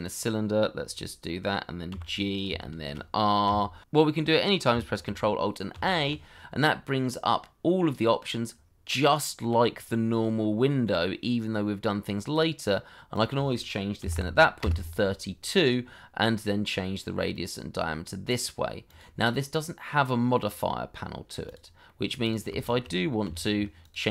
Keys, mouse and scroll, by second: 0.7 scroll down 1, 1.9 g, 2.4 shift+middle click, 3.0 r, 3.6 shift+middle click, 5.7 ctrl+alt+a, 14.0 KP_3, 14.1 KP_2, 14.6 KP_Enter, 21.8 middle click, 22.6 shift+middle click, 22.9 middle click, 23.2 r.